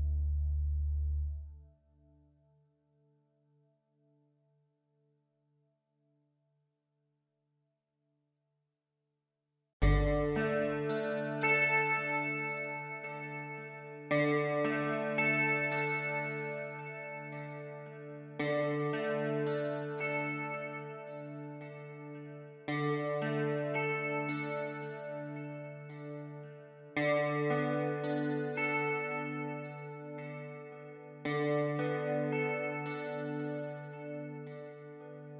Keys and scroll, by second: 1.5 Return, 3.6 ctrl+t, 5.3 Return, 7.7 ctrl+shift+[, 7.9 ctrl+], 9.8 space, 27.5 b.